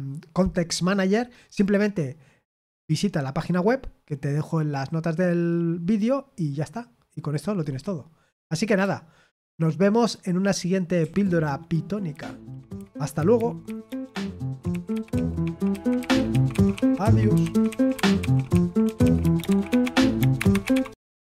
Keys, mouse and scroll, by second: 11.0 super+x, 21.2 click.